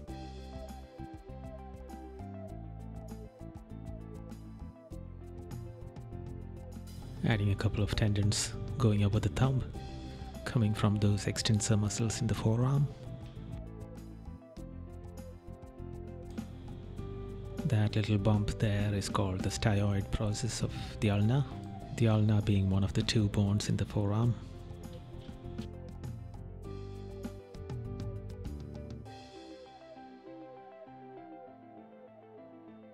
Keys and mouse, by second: 0.1 right click, 1.1 right click, 1.8 right click, 2.9 right click, 3.4 right click, 4.5 right click, 8.6 right click, 12.3 right click, 24.9 right click, 27.6 right click.